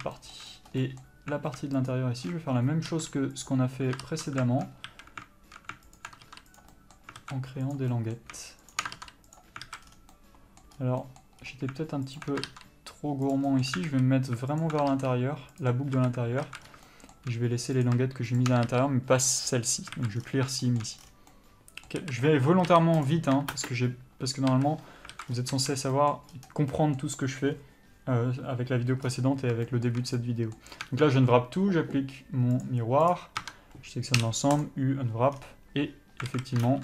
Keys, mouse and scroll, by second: 0.2 scroll down 1, 0.8 scroll up 1, 2.2 alt+shift+click, 3.7 ctrl+e, 4.3 ctrl+z, 5.2 alt+a, 6.3 alt+click, 6.9 ctrl+e, 7.0-7.9 middle drag, 7.5 alt+a, 7.9 click, 8.2-9.0 middle drag, 9.0 shift+click, 9.7 ctrl+e, 9.9 alt+a, 10.1 scroll down 1, 10.4-12.5 middle drag, 11.0 scroll up 1, 11.7-12.5 scroll up 1, 12.5 alt+click, 13.6 ctrl+e, 13.8-14.9 middle drag, 14.2 alt+a, 14.9 alt+click, 15.9 ctrl+e, 16.2 a, 16.7 alt+a, 16.9 scroll up 1, 17.2-18.1 shift+middle drag, 18.1 click, 18.7 shift+click, 19.7 ctrl+e, 20.2 alt+a, 20.5-20.9 scroll down 1, 21.1-23.8 shift+middle drag, 21.3 scroll down 1, 22.3 a, 23.4 u, 23.8 ctrl+space, 24.8 a, 25.4 alt+a, 25.6 scroll up 1, 29.4-30.0 scroll down 1, 30.0 shift+middle click, 31.2 Tab, 33.4 click, 33.7 Tab, 35.2 u, 36.6 alt+a.